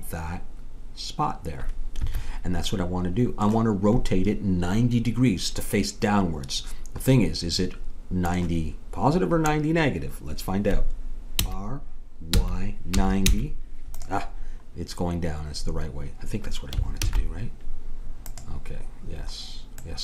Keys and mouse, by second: 2.7-5.6 middle drag, 7.2-10.9 middle drag, 11.4 r, 17.1 alt+h, 18.3-20.0 drag.